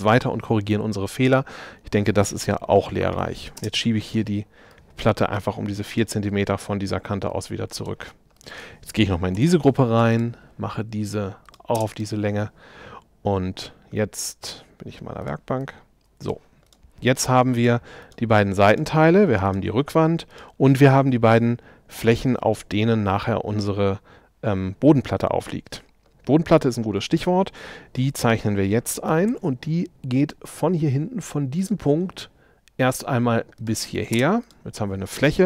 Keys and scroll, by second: 2.8 4, 3.1 Return, 3.8 space, 9.4 p, 11.8 space, 29.3 r, 34.2 space.